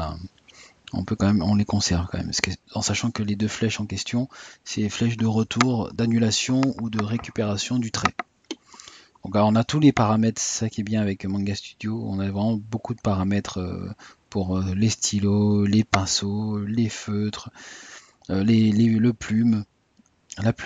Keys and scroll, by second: 2.2 Tab, 4.6 typing, 6.2 typing.